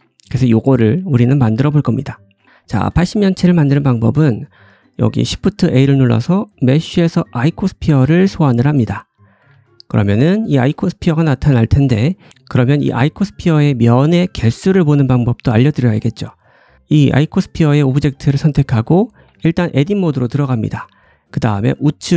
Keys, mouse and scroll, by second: 1.5-1.9 scroll down 1, 2.4 shift+middle click, 3.1 scroll down 1, 4.0 shift+right click, 4.5-9.8 shift+middle drag, 5.1 shift+a, 9.1 scroll down 1, 9.3 g, 10.0-10.5 scroll up 2, 10.5 g, 11.2 middle click, 16.5 click, 17.1 click, 19.2 Tab.